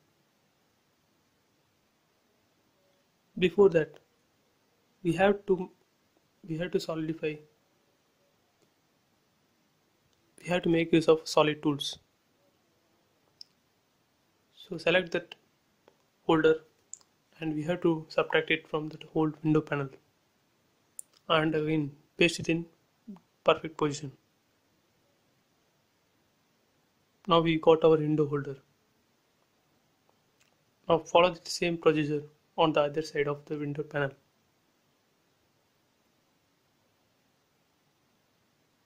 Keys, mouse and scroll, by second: 1.5 space, 2.0-3.0 scroll up 1, 3.5 middle click, 4.3 scroll up 1, 4.9 middle click, 5.8 scroll down 1, 6.9 click, 13.1 ctrl+c, 14.2 click, 16.9 space, 17.2 click, 18.3 Delete, 19.7 click, 20.1 scroll down 1, 22.3 click, 22.9 scroll up 1, 23.5 click, 26.3 scroll up 1, 27.8 scroll down 1, 30.1 click, 30.6 scroll up 1, 30.8 shift+middle click, 31.7 click, 32.4-33.0 scroll up 1, 34.0 click, 34.9-35.3 scroll up 1, 35.3 click, 36.2-36.8 scroll down 1, 36.8 click, 37.5 scroll down 1, 38.2 click.